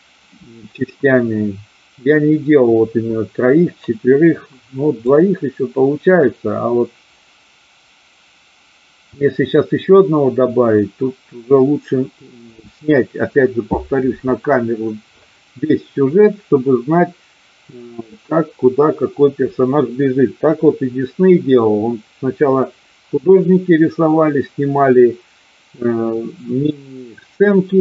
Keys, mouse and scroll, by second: 5.1-12.5 drag.